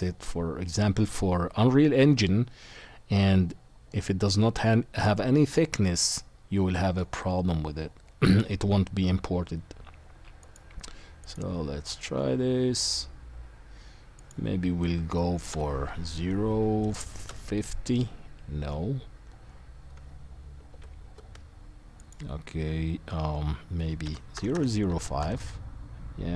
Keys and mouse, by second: 4.0 middle click, 4.5 middle drag, 5.8-10.5 middle drag, 10.5 right click, 11.2 middle click, 11.3-14.2 right drag, 14.2-17.3 middle drag, 20.7 ctrl+z, 24.5 KP_0.